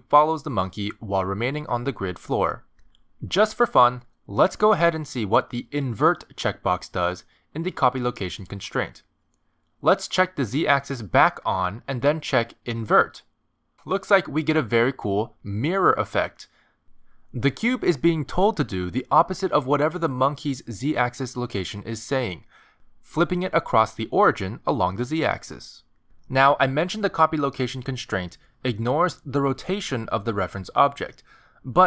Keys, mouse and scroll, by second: 0.6 g, 2.5-3.2 scroll down 2, 3.2-3.6 scroll down 1, 3.2 g, 5.6-6.2 scroll up 3, 8.2 click, 11.2 click, 13.7 click, 14.3 click, 14.7 g, 28.9 g, 31.7 click.